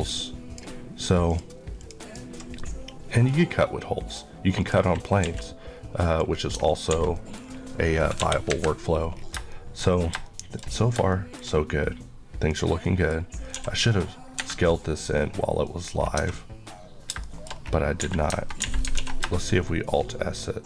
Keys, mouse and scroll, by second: 2.7 middle click, 4.6 click, 5.3 q, 6.1 click, 7.0 alt+a, 7.2 middle click, 7.5 scroll down 1, 8.3 KP_1, 9.3 scroll down 1, 9.5 middle click, 11.2 middle click, 12.5 click, 12.9 middle click, 13.3 scroll up 1, 13.6 s, 14.4 Escape, 15.1 scroll up 1, 15.2 scroll down 1, 15.7 middle click, 16.0 scroll down 1, 16.2 Tab, 16.4-17.2 scroll up 1, 17.2-17.9 shift+scroll up 2, 17.3 shift+middle click, 18.1-18.7 typing.